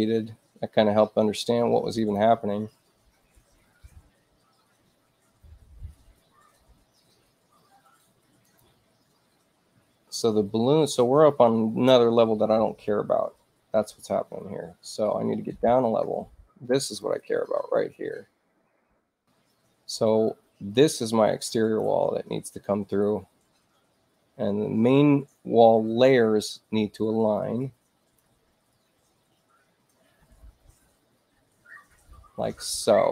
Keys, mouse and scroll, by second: 1.9 click, 2.6 Return, 8.4 click, 15.2 shift+i, 16.9 click, 18.9 click, 20.2-21.7 drag, 27.3 click.